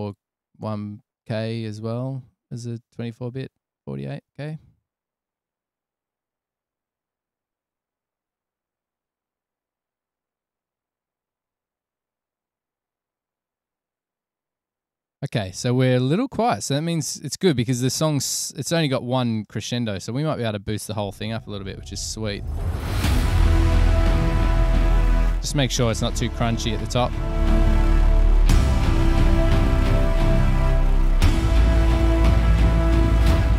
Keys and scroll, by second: 21.3 space, 22.1 super+=.